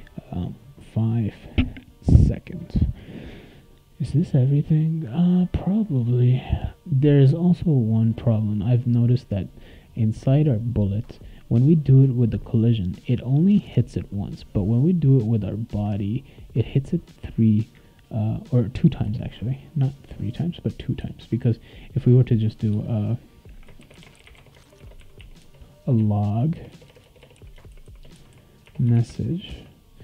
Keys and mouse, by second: 5.2 click, 8.3 click, 8.5 click, 13.2 click, 13.4 click, 15.1 click, 15.4 click, 17.2-18.6 drag, 19.0 BackSpace, 20.1 click, 21.0 BackSpace, 21.8 click, 22.5 click, 22.7 Return, 23.6-29.5 typing.